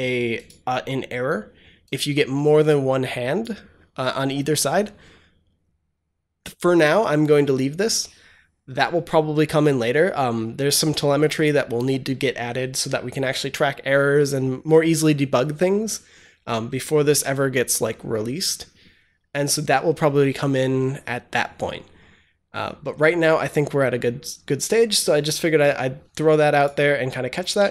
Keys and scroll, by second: 27.5 ctrl+s.